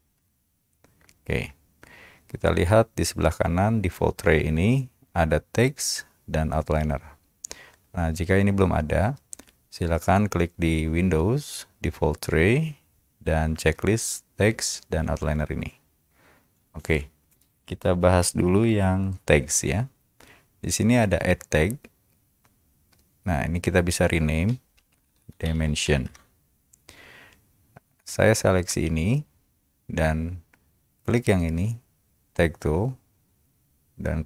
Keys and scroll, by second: 0.0-0.4 typing, 24.9-26.2 typing.